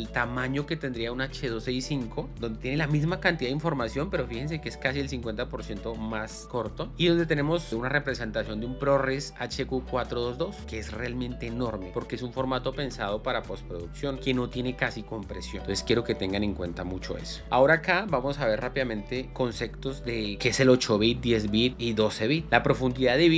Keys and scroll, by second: 15.6 space, 17.4 Down.